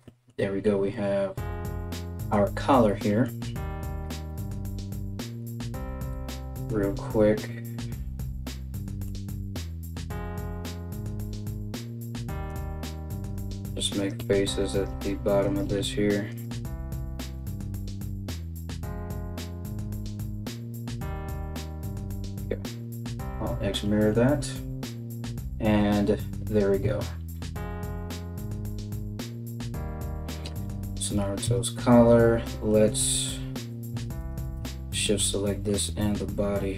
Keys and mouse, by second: 3.7 Tab, 5.8 2, 6.6 right click, 11.1 f, 12.1 right click, 12.2 middle click, 12.4-16.1 typing, 12.8 right click, 12.9 middle click, 13.6 right click, 13.7 middle click, 14.3 right click, 14.5 middle click, 15.1 right click, 15.2-20.1 middle drag, 15.9 right click, 17.9 right click, 18.0-21.3 typing, 18.7 right click, 19.3 right click, 19.7 right click, 19.9 right click, 20.1 right click, 20.1 middle click, 20.3 right click, 20.5 right click, 20.6 right click, 20.7 ctrl+middle click, 21.0 ctrl+z, 21.1 right click, 21.3-36.7 shift+middle drag, 22.7 alt+x, 26.3 KP_1, 31.0 Tab, 33.8 right click, 34.2 Tab, 35.5 z.